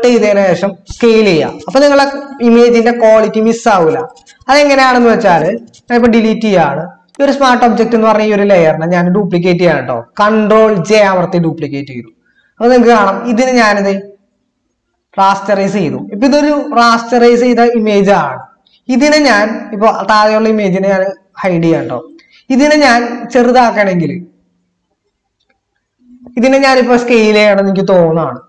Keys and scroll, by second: 10.8 ctrl+j.